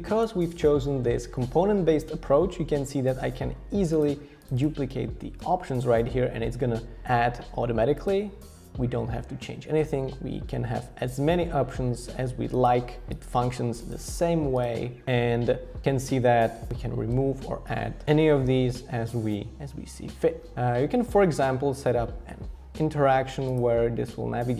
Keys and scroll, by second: 5.4 super+d, 7.0 super+d, 17.1 BackSpace, 18.0 shift+Return, 18.0 BackSpace.